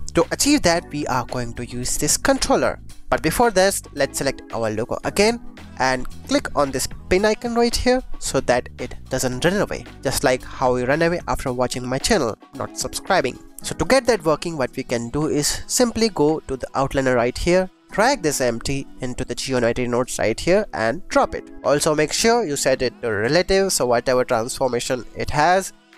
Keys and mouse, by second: 0.4-0.8 drag, 1.5 click, 4.8 click, 7.6 click, 13.7 click, 16.4 click, 17.7-20.4 drag, 21.7 click, 22.2 click, 24.1 click.